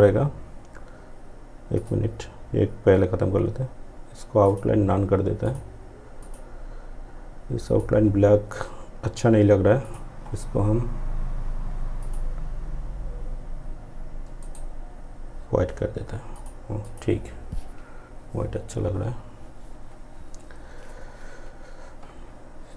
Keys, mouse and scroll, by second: 0.8 click, 3.5 click, 13.4 right click, 15.4 click.